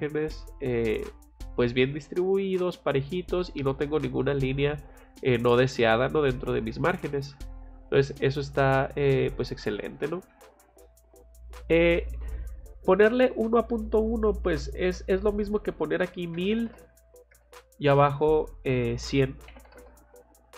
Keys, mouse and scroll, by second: 0.0 scroll up 2, 1.1 scroll down 2, 1.9 scroll up 2, 3.3 scroll up 2, 4.8-5.3 scroll down 4, 8.8 Escape, 13.9 click, 15.4 click, 18.5 click.